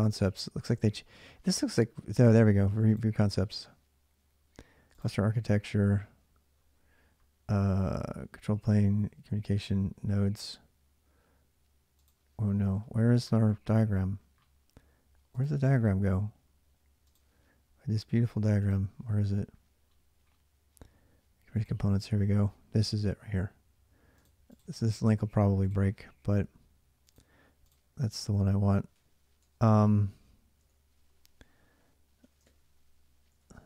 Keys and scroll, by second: 29.6 shift+., 30.4 ctrl+[, 30.5 ctrl+h, 31.0-33.6 typing.